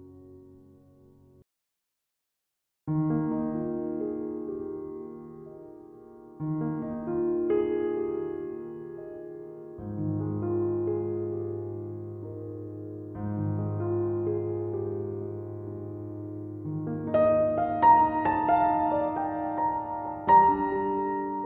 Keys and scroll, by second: 0.2 ctrl+z, 17.6 ctrl+z, 18.0 ctrl+z, 18.2 ctrl+z, 18.7 ctrl+z, 18.9 ctrl+z, 19.3 ctrl+z.